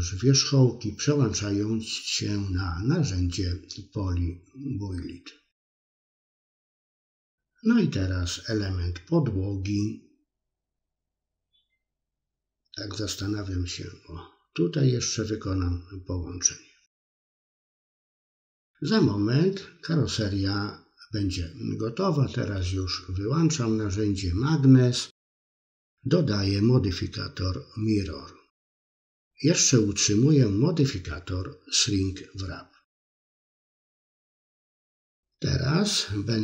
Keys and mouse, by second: 0.4 middle click, 0.9 click, 1.2 middle click, 1.7 click, 2.1 middle click, 3.0 middle click, 4.0 click, 5.3 middle click, 5.7 click, 6.1 middle click, 6.5 click, 7.0 click, 8.1 middle click, 8.4 ctrl+click, 9.6 ctrl+click, 10.6-12.1 middle drag, 12.8-13.8 ctrl+drag, 14.2 middle click, 14.7 ctrl+click, 15.5-16.9 middle drag, 17.1 KP_3, 17.8 middle click, 18.4 KP_3, 19.2 Tab, 19.8-20.1 middle drag, 22.2 click, 22.8 middle click, 23.2-23.7 middle drag, 23.8 middle click, 24.4 middle click, 26.8 click, 27.5 middle click, 28.2 click, 28.7 Tab, 29.1 middle click, 29.9 KP_3, 32.6 middle click, 32.7 middle click, 33.1 c, 34.4 c, 36.0 middle click.